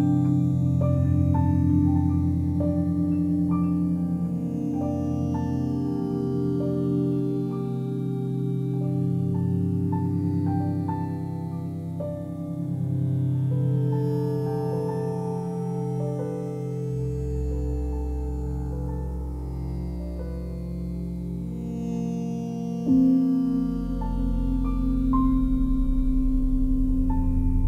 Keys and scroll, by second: 21.6 f, 25.6 F3.